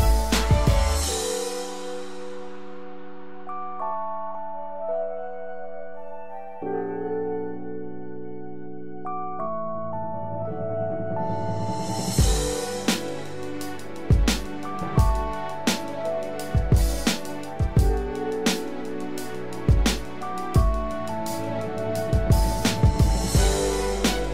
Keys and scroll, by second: 2.1 ctrl+z, 14.2 ctrl+Return, 17.0 ctrl+d, 24.2 ctrl+Return.